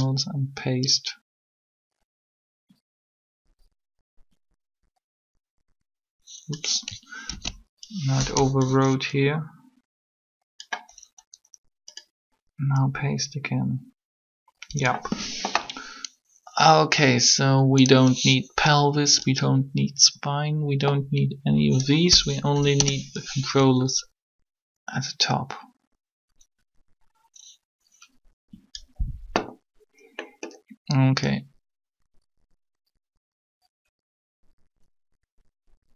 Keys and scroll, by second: 7.3 ctrl+z, 18.6 b, 22.3 Delete, 22.6 Return.